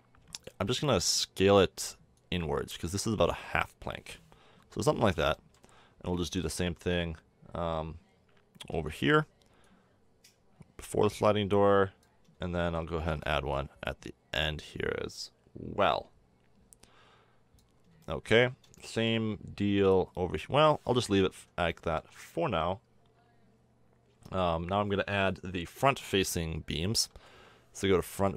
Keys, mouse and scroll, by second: 0.6 middle click, 1.4 click, 4.5 l, 8.7 shift+d, 12.9 shift+d, 18.0 middle click, 20.8 middle click, 26.9 KP_1, 27.4-28.3 middle drag.